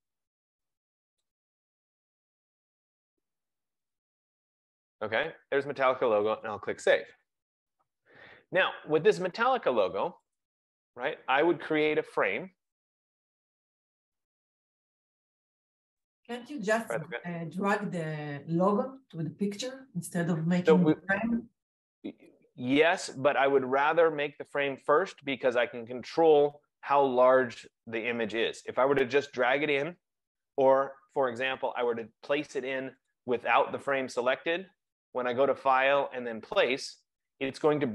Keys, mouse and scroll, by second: 1.6 click, 1.8 click, 4.0 click, 4.2 click, 6.6 click, 10.5 click, 13.3 click, 16.3 click, 21.6 F15, 32.9 click, 33.3 click, 35.1 click.